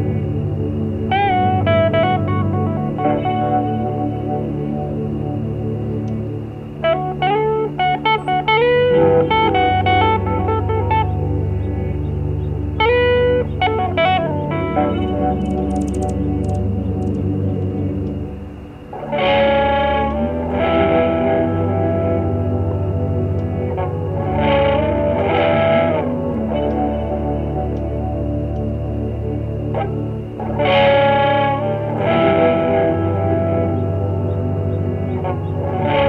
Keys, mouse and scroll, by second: 0.0 shift+click, 1.2 shift+click, 2.9 shift+click, 3.7 shift+click, 4.4 shift+click, 5.8 shift+click, 6.8 shift+click, 7.4 shift+click, 8.4 shift+click, 8.9 shift+click, 9.5 shift+click, 10.0 shift+click, 10.4 shift+click, 10.8 shift+click, 12.3 scroll down 2, 13.2 scroll down 2, 14.5 click, 15.6 Escape, 16.5 KP_Subtract, 17.4 click, 18.5 F1, 18.9 click, 19.6 ctrl+z, 20.4 F6, 21.2 shift+click, 21.5 shift+click, 22.6 shift+click, 23.2 shift+click, 24.3 shift+click, 24.7 shift+click, 25.0 shift+click, 25.6 shift+middle click, 27.0 shift+click, 28.0 shift+F1, 29.5 click, 31.8 click, 32.1 middle click, 35.0 click, 35.4 shift+click, 35.8 shift+click.